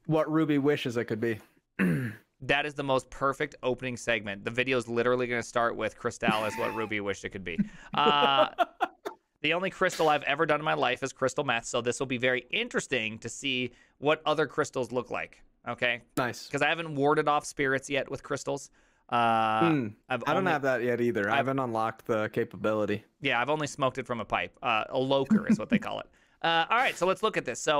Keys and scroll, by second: 0.1 alt+{.